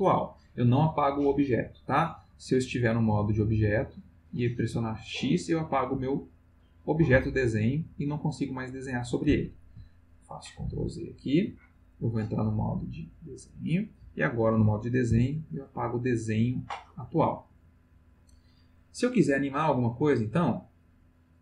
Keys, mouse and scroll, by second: 2.8 click, 3.7 click, 4.7 x, 6.2 click, 10.6 ctrl+z, 12.2 click, 13.4 click, 15.1 x, 15.5 click, 20.7 click.